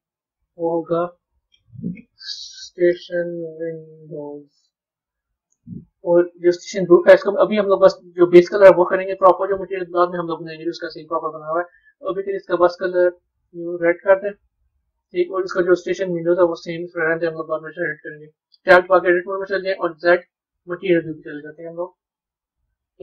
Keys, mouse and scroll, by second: 0.5-3.6 drag, 6.5 click, 8.1 click, 10.7 click, 11.8 click, 17.8 b, 22.2-23.0 middle drag.